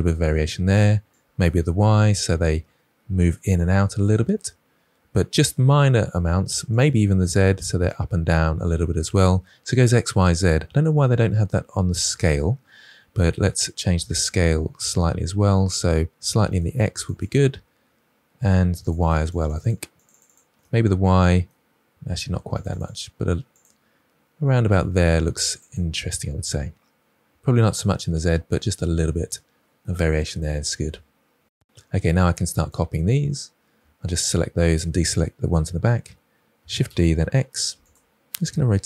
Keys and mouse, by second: 1.1-4.0 drag, 6.7 click, 7.1 click, 16.9 click, 19.0 click, 19.2 click, 19.4 click, 19.6 click, 19.9 click, 20.1 click, 20.2 click, 22.5 click, 22.8 click, 23.6 click, 28.1 click, 29.5 middle click, 31.2 KP_1, 34.3-34.6 shift+middle drag, 36.6 shift+d, 36.8 x, 38.5 r.